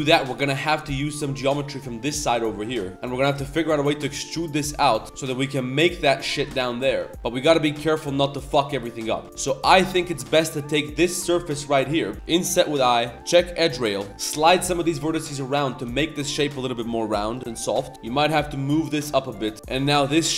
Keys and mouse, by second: 0.6 click, 1.6 click, 2.0 shift+click, 2.9 ctrl+z, 2.9 ctrl+click, 3.4 shift+click, 3.6 middle click, 3.8 e, 4.6 s, 6.9 Tab, 7.0 middle click, 8.1 KP_7, 8.2 z, 9.2 ctrl+z, 9.3 3, 9.6 click, 10.0 ctrl+shift+click, 10.2 middle drag, 10.7 click, 11.0 ctrl+click, 11.4 shift+click, 11.7 middle click, 13.5 click, 14.1 ctrl+z, 14.1 g, 14.1 click, 14.4 g, 15.6 click, 16.5 click, 16.5 g, 17.3 click, 17.4 g, 19.8 KP_7.